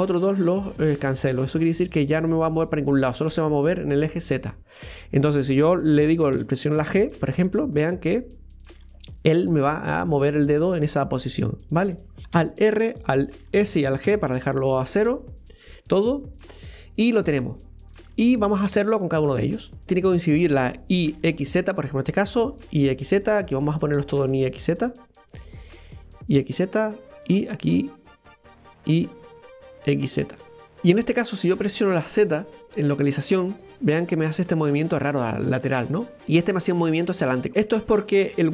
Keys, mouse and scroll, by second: 4.8-6.3 scroll down 1, 6.3 g, 12.4 alt+r, 13.6 alt+s, 14.0 alt+g, 16.5-17.3 scroll down 1, 17.3-19.8 middle drag, 19.8 right click, 22.3 right click, 23.5 right click, 24.2-27.2 drag, 27.2 right click, 27.9-30.6 drag, 33.3-36.2 drag, 36.2 right click, 37.0 click, 37.5-38.5 middle drag.